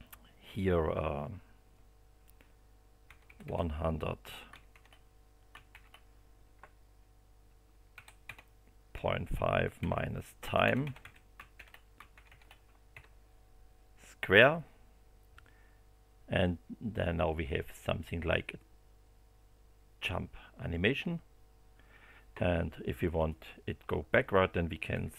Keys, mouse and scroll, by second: 2.8-3.7 typing, 5.7 shift+8, 7.9-11.5 typing, 12.9 2, 17.6 click, 23.2 click, 23.6 Home, 24.9 2.